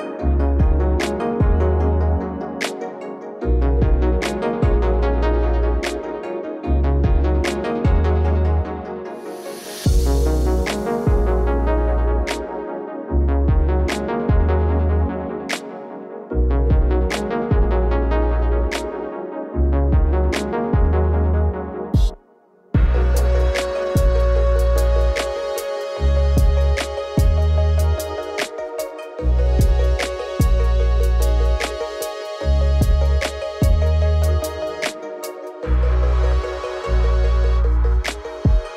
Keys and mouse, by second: 0.2 ctrl+s, 0.9 alt+shift+z, 1.1 alt+shift+z, 1.2 KP_0, 1.8 alt+shift+z, 1.9 click, 2.3 n, 3.7 click, 4.5 click, 4.8 click, 4.9 click, 5.1 click, 5.3 click, 6.2 g, 6.9 KP_0, 7.2 z, 8.6 click, 10.0 click, 10.4 click, 10.8 click, 11.6 click, 12.1 click, 12.3 click, 15.5 space, 16.1 click, 17.3 click, 18.4 shift+d, 19.0 click, 19.1 click, 21.6 click, 23.3 click, 24.0 click, 25.0 alt+shift+z, 25.4 alt+shift+z, 25.7 click, 26.3-29.6 typing, 28.6 click, 29.4 click, 31.2 space, 32.2 click, 32.4 z, 33.1 alt+shift+z, 34.8 click, 35.2 click, 35.7 click, 36.2 click, 36.5 click, 37.1 click, 38.4 click.